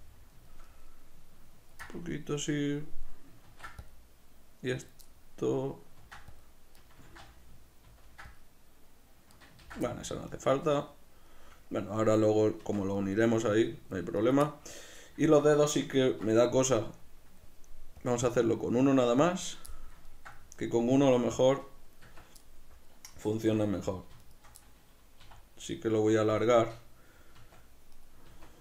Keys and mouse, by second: 3.5 ctrl+r, 4.9 click, 5.1-6.9 middle drag, 6.0 ctrl+r, 6.9 right click, 7.1 ctrl+z, 9.4 right click, 9.6 ctrl+z, 9.8-18.0 middle drag, 12.6 Tab, 16.0 ctrl+2, 18.0-19.7 drag, 19.7-23.9 middle drag, 22.1 Tab, 23.5 3, 23.9 right click, 24.6-26.4 middle drag, 25.2 e, 26.4 click, 26.5-27.9 middle drag, 27.4 Tab, 27.9 right click, 28.3 Tab.